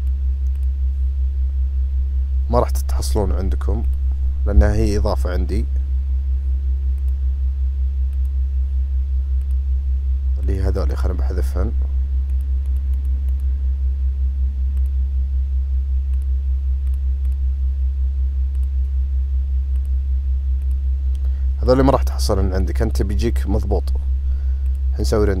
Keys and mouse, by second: 0.0-0.7 drag, 4.6 n, 7.0 click, 10.9 click, 12.7 click, 13.0 click, 13.4 click, 14.8 click, 16.3 click, 16.9 click, 18.6 click, 19.8 click, 22.0 click, 22.2 click, 22.7 click, 22.9 click, 23.1 click, 24.7-25.4 drag.